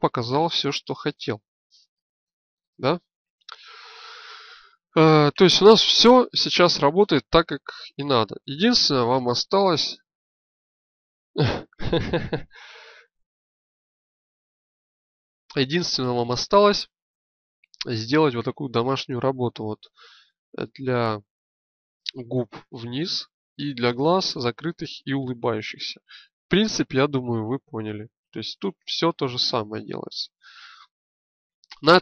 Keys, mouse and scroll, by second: 8.1-10.0 right drag, 9.5 g, 18.3-21.1 drag, 25.6-28.6 drag, 30.2-32.0 middle drag.